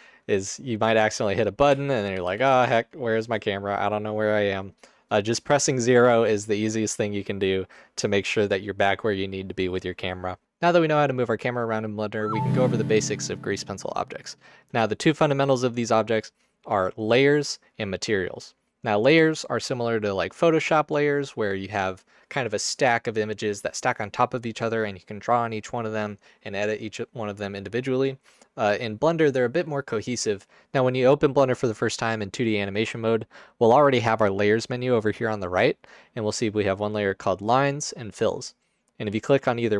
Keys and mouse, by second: 1.7-3.3 typing.